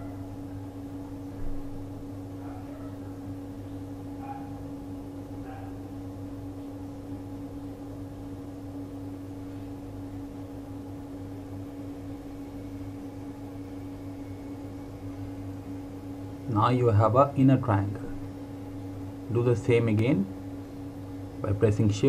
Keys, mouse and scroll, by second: 2.6 shift+Num_Lock, 2.9 shift+click, 4.5 click, 16.2 click.